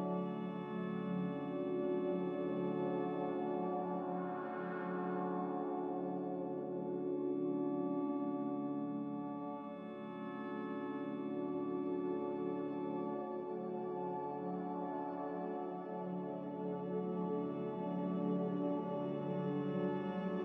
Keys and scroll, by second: 0.2 ctrl+z, 4.2 z, 5.9 Return, 5.9 1, 5.9 0, 9.2 5, 9.6 Return, 14.8 5, 15.0 Return, 18.8 q, 20.3 q.